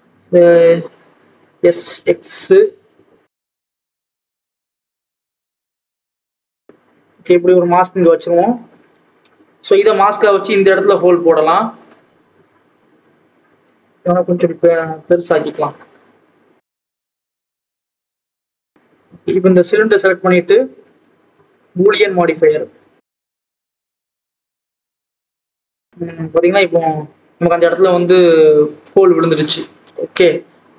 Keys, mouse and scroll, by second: 0.0 s, 1.6-2.9 scroll down 1, 2.9 click, 3.7-4.3 scroll up 1, 4.3 Tab, 4.5 Tab, 4.8 g, 6.1-6.7 scroll down 1, 7.3 click, 10.7 click, 11.9 click, 12.5 click, 13.4 Tab, 13.7 s, 17.5 Tab, 17.6 alt+a, 17.7-18.2 scroll down 1, 18.2 click, 18.4-19.0 scroll up 1, 19.0 click, 22.1-23.4 drag, 24.9 click, 25.2-25.7 scroll up 2, 25.7 alt+a, 25.8 click, 29.3-30.7 scroll up 1.